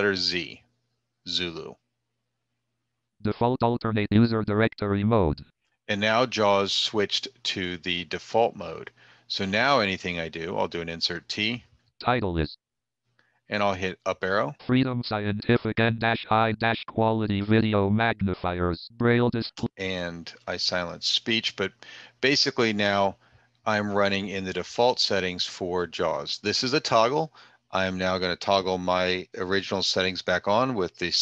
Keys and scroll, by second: 10.5 t.